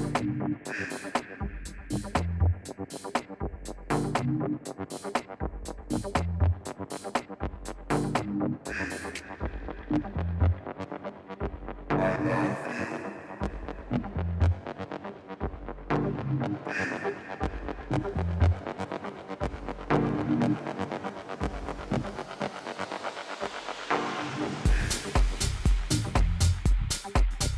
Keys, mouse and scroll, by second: 4.8-8.2 typing, 10.5 KP_3, 22.1-24.8 middle drag, 24.8-26.7 drag, 26.2 n, 27.0-27.5 middle drag.